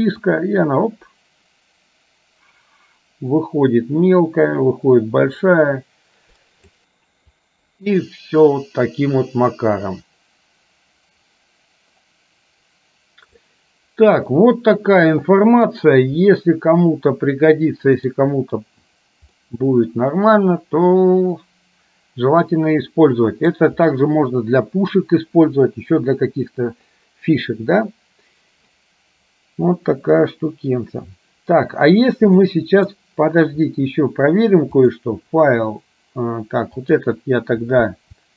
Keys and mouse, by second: 0.3-6.8 drag, 7.5-13.5 drag, 14.5-15.9 middle drag, 16.4-18.3 middle drag, 19.5-23.6 drag, 32.6 middle click, 35.0-36.1 drag, 36.9 click.